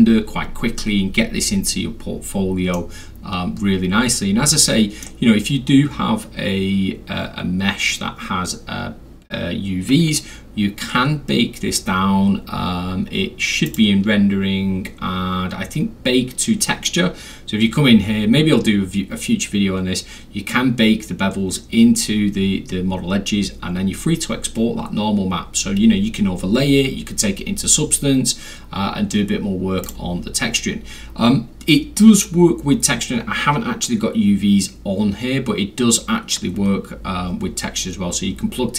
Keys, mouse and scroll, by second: 2.7-5.0 middle drag, 13.6 click, 29.8 click, 35.6 scroll down 1, 35.6 middle click, 35.6 scroll.